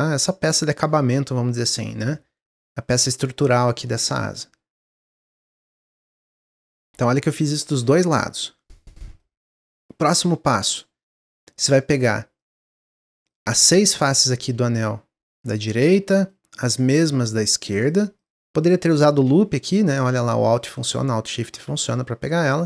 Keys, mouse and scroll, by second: 6.0-9.1 middle drag, 10.1 click, 11.4 shift+click, 11.9 shift+click, 12.4 shift+click, 12.8 shift+click, 15.6 middle click, 16.6 shift+click, 16.9 shift+click, 17.3 shift+click, 17.9 shift+click, 18.2 shift+click, 18.6-19.9 shift+drag, 20.5 middle click, 21.4 alt+shift+click, 21.7-22.6 middle drag.